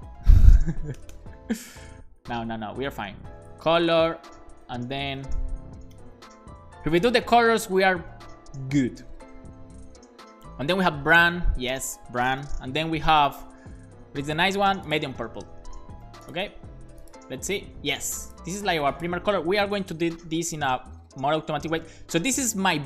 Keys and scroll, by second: 0.1 Right, 0.4 BackSpace, 1.7 alt+Right, 3.0 Right, 3.1 Right, 3.3 Right, 3.8 Right, 5.2 BackSpace, 15.9 super+s, 19.5 shift+super+Right, 19.9 shift+Left.